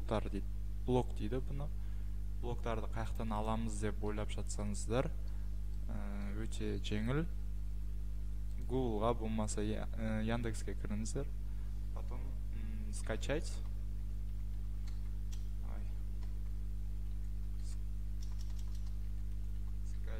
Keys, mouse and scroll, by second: 2.4 middle click, 2.5 middle click, 3.2 click, 3.4 click, 3.7 Escape, 4.6-5.7 scroll, 5.8-6.2 scroll, 8.5 scroll, 8.6 click, 9.8-11.1 scroll, 12.8-16.3 typing, 14.9 scroll, 18.1-20.1 typing.